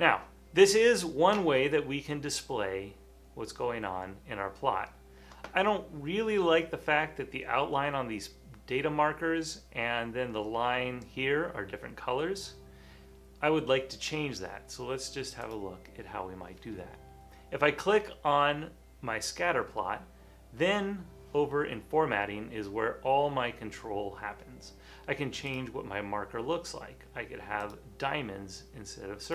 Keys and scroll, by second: 1.8 typing.